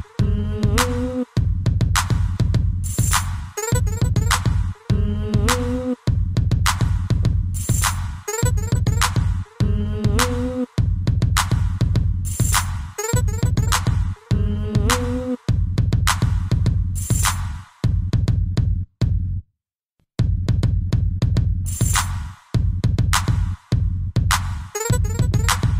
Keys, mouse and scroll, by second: 2.5 Escape, 3.6 click, 11.4 middle click, 11.5 middle click, 12.0 scroll up 1, 12.2 shift+middle click, 12.4 middle click, 12.8 ctrl+s, 17.3 click, 18.2 shift+space, 20.9 Escape, 21.4 ctrl+s.